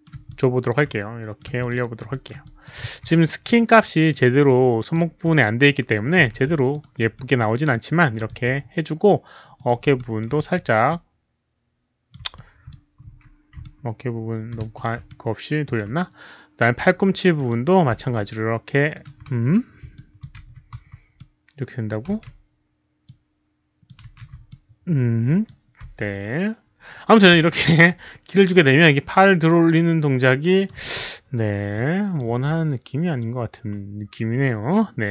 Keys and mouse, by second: 0.1 alt+w, 0.2-0.6 alt+drag, 0.9 middle click, 1.5 alt+click, 1.8 alt+right drag, 2.1 alt+middle click, 2.4 alt+click, 3.4-4.1 alt+drag, 3.4 alt+middle click, 3.4 alt+right click, 3.4 e, 4.4-4.9 alt+drag, 4.9 alt+middle click, 4.9 alt+right click, 5.2-5.6 alt+drag, 6.2 s, 6.5 alt+click, 6.7 alt+right drag, 7.1 alt+drag, 7.7-8.2 alt+drag, 8.0-8.8 typing, 8.2 alt+right click, 9.5 alt+click, 9.9 alt+click, 9.9-14.6 typing, 10.2 alt+right click, 10.8-12.1 alt+drag, 10.8 alt+right click, 12.1 alt+right click, 12.3-12.6 alt+drag, 13.6-14.4 alt+drag, 15.0-15.6 alt+drag, 17.3 alt+click, 17.3-23.0 typing, 18.1-18.8 middle drag, 18.8 alt+click, 18.9 middle click, 19.9 alt+drag, 19.9 middle click, 21.1-21.8 alt+drag, 21.1 middle click, 23.0-23.8 alt+drag, 23.0 middle click, 24.1 z, 24.4-25.4 alt+drag, 25.6-26.3 typing, 27.3 s, 27.8-30.6 alt+drag, 30.9-32.1 alt+drag, 31.9-33.3 typing, 32.8 alt+click, 35.0-35.1 typing.